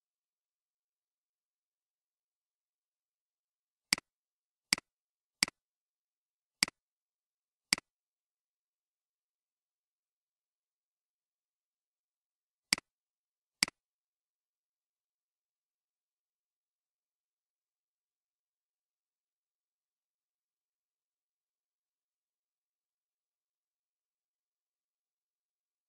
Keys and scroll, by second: 9.7-10.9 typing.